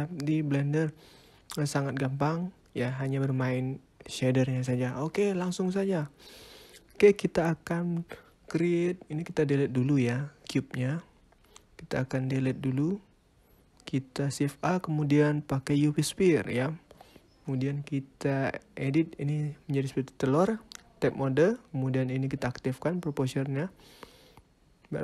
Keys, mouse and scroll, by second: 0.5 scroll up 3, 1.4 scroll down 4, 2.1 middle click, 2.9 middle click, 11.0 click, 11.4 click, 12.2 x, 13.1 shift+a, 15.6-16.2 scroll up 5, 16.4 middle click, 16.9 scroll up 1, 17.1 scroll down 3, 17.9 shift+middle click, 18.2 scroll up 2, 19.9 Tab, 22.3 click, 23.0 click, 23.5 middle click, 24.2 click.